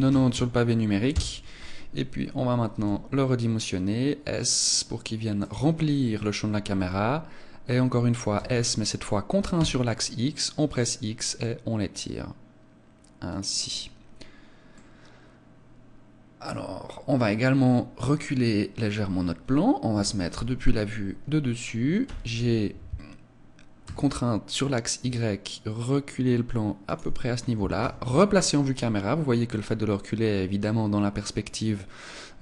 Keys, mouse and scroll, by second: 5.6 click, 8.4 s, 13.4 click, 14.8 middle click, 17.2-18.8 scroll up 2, 20.0 KP_7, 22.1 g, 27.0 click, 27.8 KP_0.